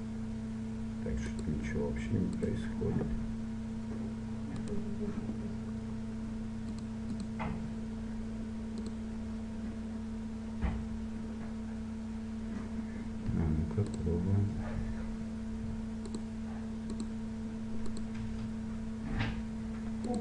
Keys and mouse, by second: 1.7-4.4 drag, 4.8-6.5 right drag, 6.5-11.0 drag, 14.0-16.0 drag, 16.4-20.1 drag.